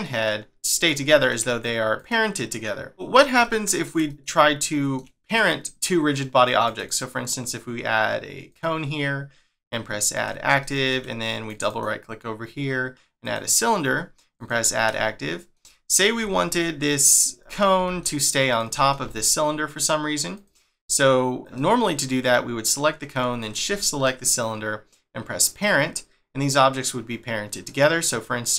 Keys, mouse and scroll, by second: 0.0 middle click, 1.9 click, 2.9 click, 3.4 shift+middle click, 6.6 right click, 6.8 right click, 10.1 click, 10.6 shift+middle click, 11.5 right click, 11.7 right click, 14.3 click, 14.9 shift+middle click, 16.2 g, 17.3 middle click, 17.8 g, 18.7 middle click, 19.0 g, 21.4 click, 21.6 middle click, 23.4 shift+click, 23.8 middle click, 25.5 click, 26.9 middle click, 28.1 click.